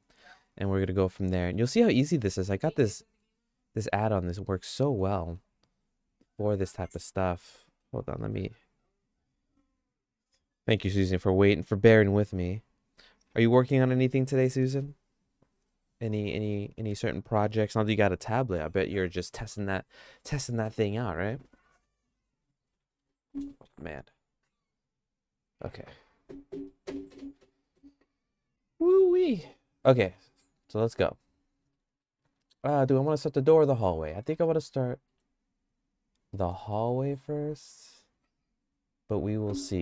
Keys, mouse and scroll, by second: 0.4 middle click, 0.9 shift+middle click, 1.9 middle click, 2.9 middle click, 4.4 click, 5.3 Right, 31.7 middle click, 34.1 middle click, 34.5 shift+middle click, 36.3 middle click, 36.7-38.0 shift+middle drag.